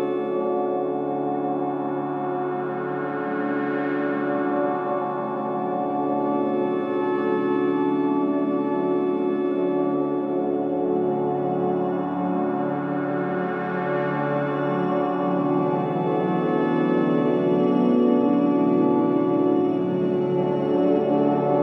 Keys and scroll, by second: 0.7 Return, 1.0 Escape, 1.1 Return, 1.4 Escape, 1.5 Delete, 2.7 3, 3.3 Delete, 6.4 ], 6.8 ], 9.1 ], 9.7 ], 11.6 ctrl+z, 17.0 ctrl+z, 20.4 4, 21.3 shift+i.